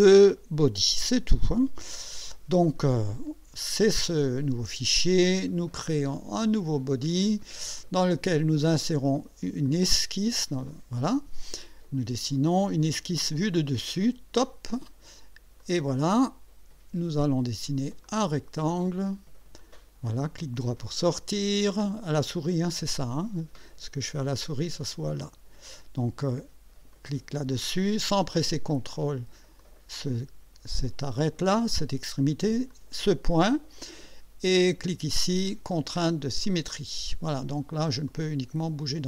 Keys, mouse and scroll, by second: 4.0 click, 6.2 click, 9.7 click, 13.1 click, 15.6 click, 18.1 click, 18.9 click, 19.6 click, 20.3 right click, 27.0 click, 29.6 click, 32.8 click, 36.5 click, 38.1-39.0 drag.